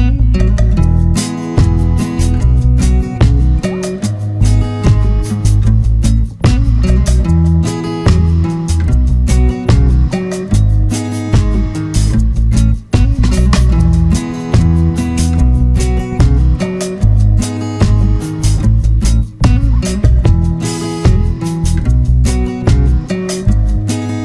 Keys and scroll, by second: 5.4 ctrl+0, 5.9 ctrl+=, 14.4 ctrl+=, 14.7 ctrl+space, 15.1 ctrl+=.